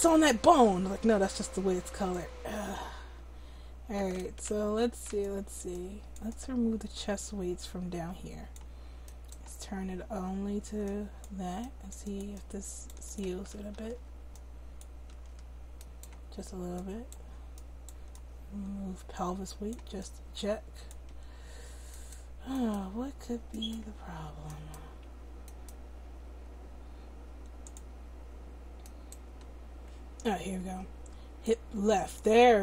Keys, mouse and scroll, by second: 2.1-4.6 drag, 4.6 ctrl+z, 9.1-13.6 drag, 13.6 ctrl+z, 13.9 ctrl+z, 15.3 ctrl+z, 18.5-27.1 drag, 27.6-32.6 drag, 28.8-31.4 right drag.